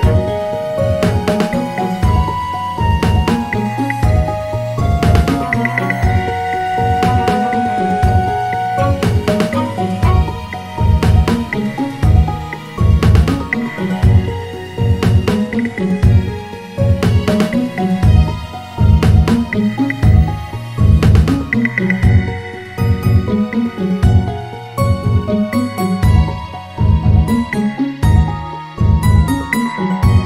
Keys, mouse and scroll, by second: 1.0 click, 1.8 g, 3.4-5.4 scroll down 1, 5.4 shift+d, 12.4 click, 13.4-14.0 scroll up 1, 14.0 s, 19.5 click, 21.2 r, 23.2 g, 26.7 click.